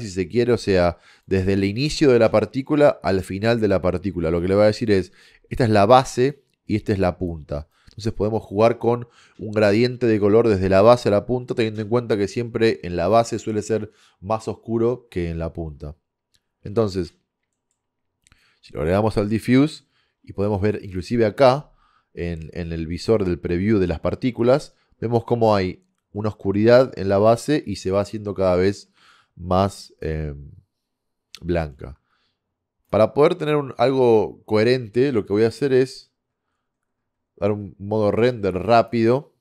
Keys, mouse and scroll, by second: 1.2-15.3 drag, 17.4-18.5 middle drag, 18.5-20.4 drag, 20.9-22.7 drag, 32.9-34.5 drag, 35.7-39.4 drag.